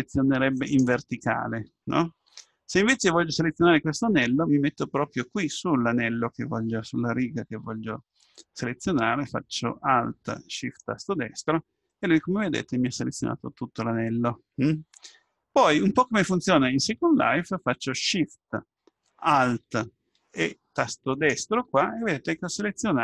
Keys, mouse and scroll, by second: 0.6-2.7 right drag, 2.2 a, 10.6-12.5 right drag, 11.9-13.8 middle drag, 21.2-23.0 right drag.